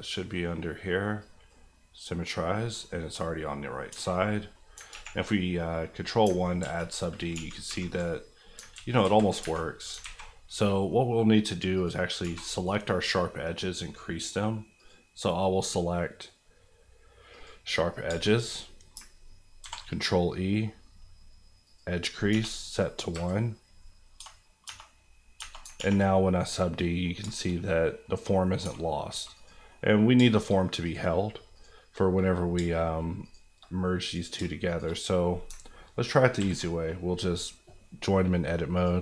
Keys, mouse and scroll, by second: 2.7 scroll down 1, 3.2 middle click, 3.9 Tab, 4.1 middle click, 4.7 scroll up 2, 4.9 ctrl+1, 5.3 middle click, 5.6 scroll up 1, 6.3 ctrl+scroll up 1, 6.6 ctrl+z, 7.3 ctrl+1, 7.6 ctrl+2, 8.3-8.7 scroll up 2, 8.7 ctrl+z, 9.4 Tab, 10.0 alt+a, 10.5 middle click, 11.7 click, 12.2 2, 12.5 click, 18.0 shift+click, 18.1 shift+middle click, 18.5 middle click, 19.0 ctrl+middle click, 19.6 ctrl+e, 21.6 click, 22.3 1, 23.1 KP_Enter, 24.1 Tab, 25.2-26.1 scroll down 3, 25.7 ctrl+1, 26.4 middle click, 27.2-28.5 shift+middle drag, 28.6 Tab, 29.3 click, 29.7 middle click, 30.1 shift+middle click, 30.4 middle click, 30.8 click, 32.5 shift+click, 33.3 click, 34.4 shift+click, 35.0 click, 35.5 ctrl+click, 36.4 ctrl+j, 38.7 click.